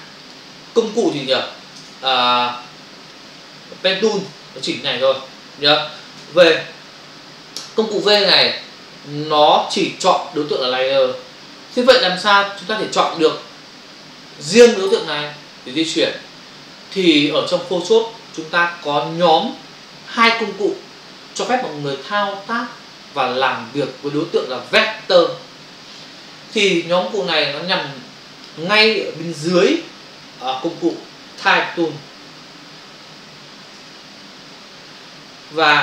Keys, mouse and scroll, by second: 0.2 click, 1.1 ctrl+alt+z, 5.0 ctrl+click, 6.1 v, 14.5 click, 15.8 click, 27.2 click, 30.8 click, 31.0 click, 32.6 Return, 34.2 ctrl+v, 34.6 typing.